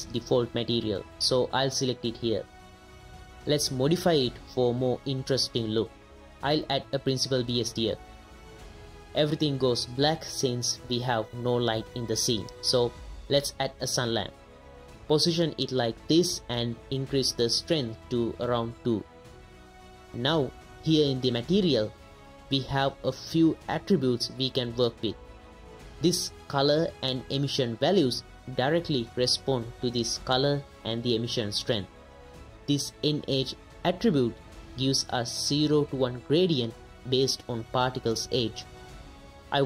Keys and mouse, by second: 1.8 right click, 3.6 middle click, 5.3 middle click, 6.2 shift+a, 8.6 click, 11.5 z, 13.1 shift+a, 15.1 g, 15.1 z, 15.5 drag, 15.8 z, 16.6 click, 16.9 KP_0, 17.3 click, 18.0 right click, 20.1 right click, 21.5 ctrl+shift+right click, 23.6 right click, 23.9 right click, 24.7 right click, 25.0 right click, 26.8 ctrl+shift+right click, 29.1 right click, 30.8 ctrl+shift+right click, 33.0 right click, 33.7 ctrl+shift+right click, 34.7 right click, 35.6 click, 37.7 ctrl+shift+click, 38.7 click.